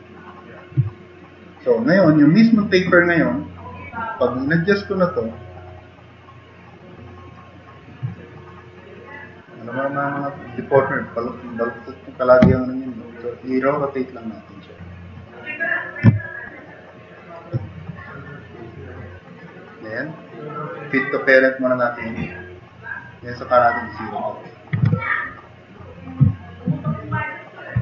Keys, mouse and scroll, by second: 8.4-8.9 drag, 9.8 click, 13.9-17.0 drag.